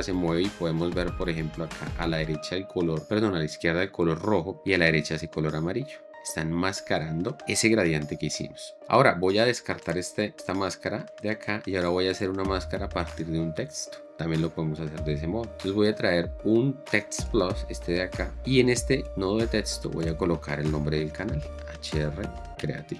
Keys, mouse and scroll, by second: 11.4 drag, 20.8-22.9 typing.